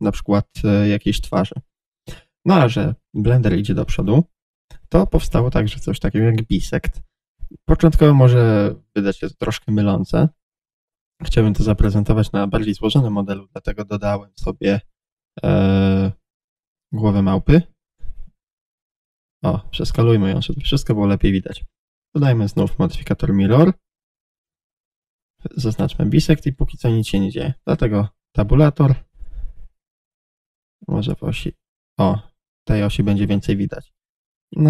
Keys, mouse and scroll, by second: 4.2 Tab, 6.9 shift+a, 10.5 g, 15.3 Escape, 17.2 click, 18.5 g, 19.1 click, 19.5 s, 20.5 click, 21.5 middle click, 22.2-24.6 drag, 24.6-25.6 shift+middle drag, 25.6 click, 27.2-31.5 shift+middle drag, 27.5 Tab, 31.5 click, 32.4-34.6 middle drag, 34.2 g.